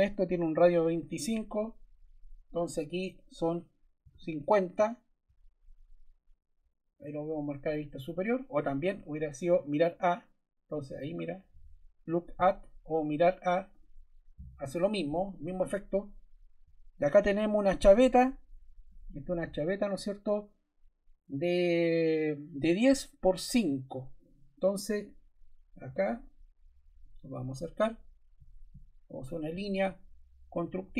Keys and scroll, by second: 3.7-4.6 typing, 4.7 Return.